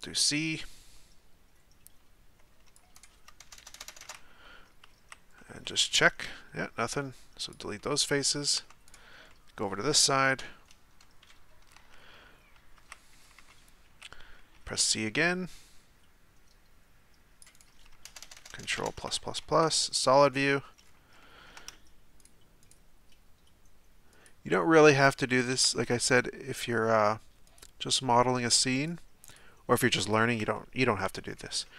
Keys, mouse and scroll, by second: 0.1 c, 3.5-4.0 ctrl+KP_Add, 5.1 z, 5.4-7.5 middle drag, 7.5 x, 7.8-8.6 middle drag, 8.6 Tab, 8.9-9.3 right drag, 9.3-10.4 middle drag, 10.4 KP_3, 11.2 KP_9, 11.8 Tab, 12.9 z, 13.2 a, 13.4 a, 14.8 c, 18.1-18.7 ctrl+KP_Add, 19.6 z, 19.9-20.8 middle drag, 20.8-21.2 scroll up 2, 21.2-22.2 shift+middle drag, 22.2 shift+right click, 22.6 shift+right click, 24.1-25.4 shift+right drag, 25.7-26.2 scroll up 1, 26.2-27.5 shift+middle drag, 27.5 shift+right click, 28.7 shift+right click, 29.7 shift+right click, 30.5-31.2 middle drag, 31.2-31.6 scroll down 1, 31.6-31.7 shift+middle drag.